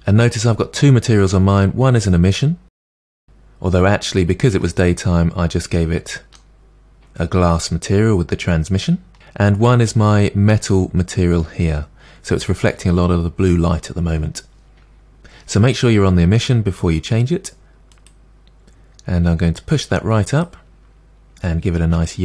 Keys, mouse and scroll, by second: 9.6 click, 15.7 click, 19.7 click.